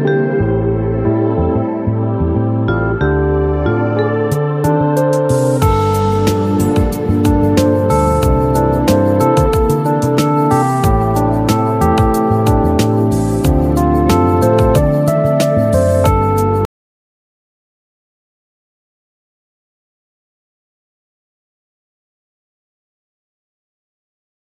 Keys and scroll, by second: 10.0 ctrl+q.